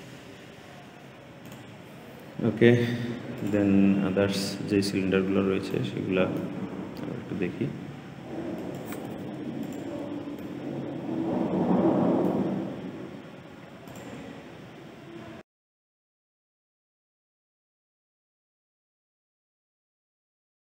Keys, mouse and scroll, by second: 1.3 click, 3.2 click, 3.8-5.6 scroll down 8, 5.6-6.6 middle drag, 6.6-7.7 scroll down 5, 8.4 click, 9.5 shift+click, 10.3-13.8 middle drag, 13.8-16.1 drag, 16.1-16.8 scroll down 3, 16.8 click, 17.3 shift+middle click, 17.6 scroll up 3, 17.8-18.3 scroll down 4, 18.7 click, 19.4 click, 19.8-20.3 scroll down 4, 20.3-20.8 typing.